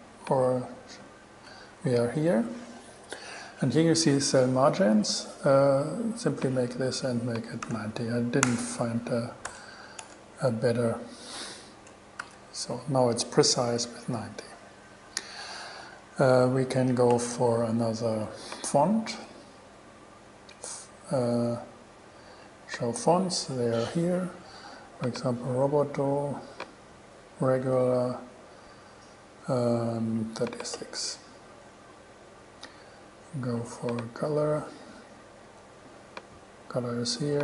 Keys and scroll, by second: 1.1 shift+super+e, 7.6-8.4 typing, 8.7 Return, 9.7 BackSpace, 12.4 shift+super+e.